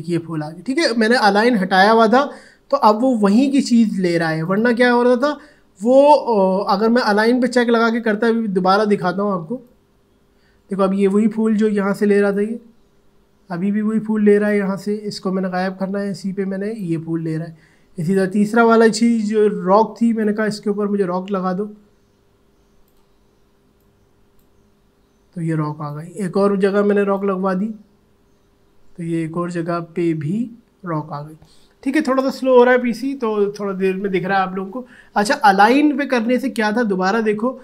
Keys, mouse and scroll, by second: 4.5 click, 9.6-29.8 drag.